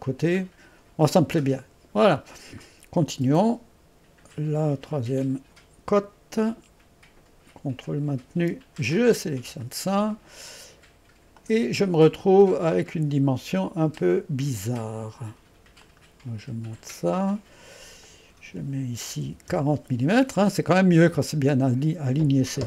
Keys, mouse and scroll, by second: 1.8 scroll down 1, 4.6 click, 8.5 ▭, 9.0 click, 11.4 click, 15.9-17.1 drag, 18.1 click.